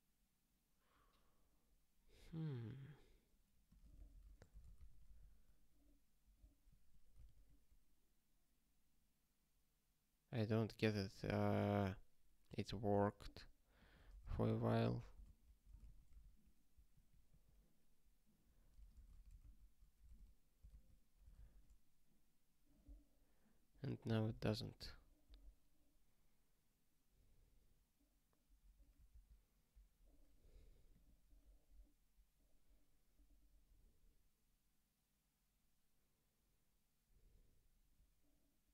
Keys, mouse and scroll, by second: 2.9 click, 3.6 click, 3.9 ctrl+a, 4.1 ctrl+space, 4.2 ctrl+e, 4.5 alt+;, 4.8 ctrl+s, 5.2 ctrl+k, 6.6 ctrl+/, 7.2 ctrl+s, 13.7 click, 14.1 ctrl+p, 14.4 ctrl+p, 14.6 ctrl+a, 14.9 ctrl+n, 15.2 alt+;, 15.8 ctrl+s, 16.4 ctrl+k, 16.9 ctrl+/, 17.2 ctrl+/, 18.6 ctrl+space, 18.8 ctrl+a, 20.6 alt+;, 21.4 ctrl+s, 23.2 scroll down 1, 23.8 scroll up 1, 24.6 ctrl+k, 25.4 scroll up 1, 28.2 scroll down 1.